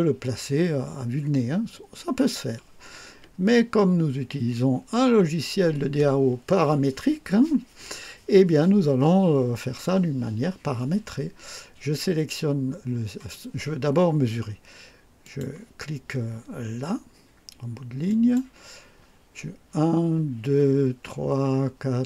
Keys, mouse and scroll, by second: 3.1 Escape, 15.2 click, 18.1 click.